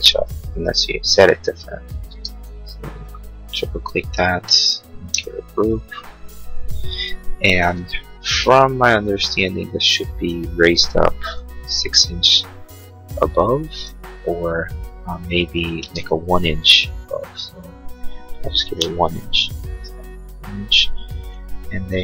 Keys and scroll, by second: 2.1 space, 5.1 g, 8.8 m, 11.5 6, 11.6 Return, 16.0 ctrl+z, 18.6 1.